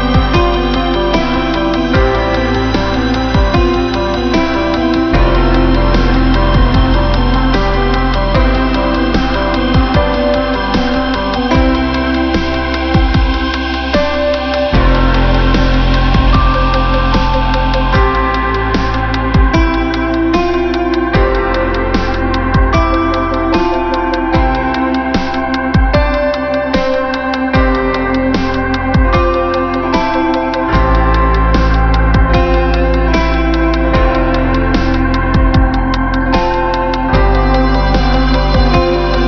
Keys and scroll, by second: 11.2 ctrl+alt+shift+n, 31.2 ctrl+alt+shift+n, 32.7 ctrl+alt+shift+n.